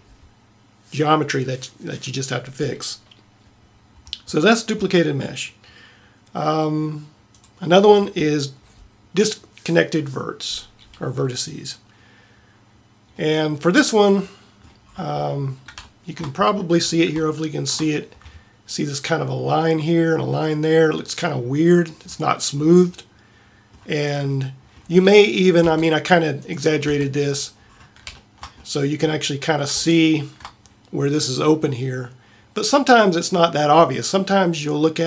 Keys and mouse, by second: 9.4-13.3 middle drag, 25.6 Tab, 27.0 Tab.